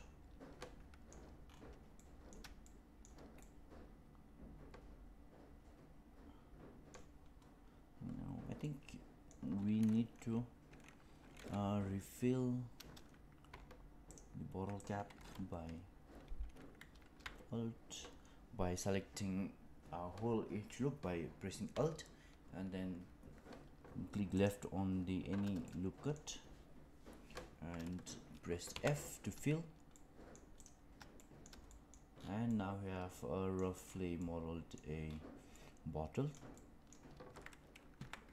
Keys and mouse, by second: 1.9 middle click, 2.6 shift+middle click, 3.3-6.9 middle drag, 8.6 middle click, 14.0 alt+click, 24.3 alt+click, 25.6 middle click, 28.7 f, 29.8 middle click, 31.1 shift+middle click, 31.6 middle click, 32.4-33.5 middle drag, 34.1 middle click, 35.4 middle click, 36.5 middle click, 37.9 Tab.